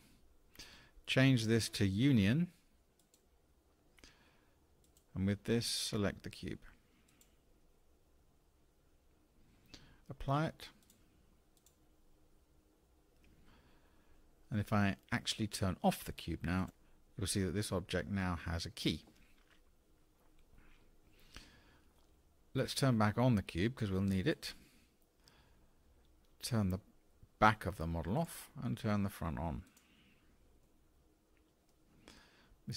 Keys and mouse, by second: 3.0 click, 4.8 click, 11.0-12.6 drag, 16.6 click, 17.4-18.8 middle drag, 24.3 click, 28.2 click, 29.7 click, 30.7-31.7 middle drag.